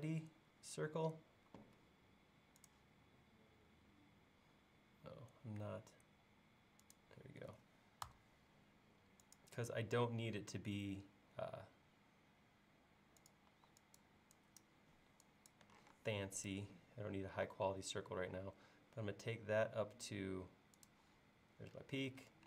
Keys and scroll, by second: 1.5 l, 8.1 c, 13.5 e, 15.9 p.